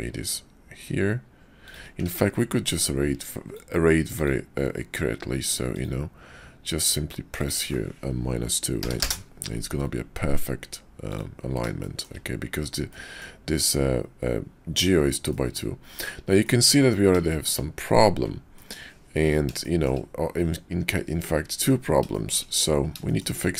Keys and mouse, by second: 2.1 ctrl+`, 11.8 shift+drag, 12.9-13.2 drag, 15.3 drag, 16.4 shift+drag, 17.3 shift+drag, 18.6 click, 19.6 shift+middle drag, 21.7 middle click, 22.1 shift+middle drag, 23.0 shift+middle click.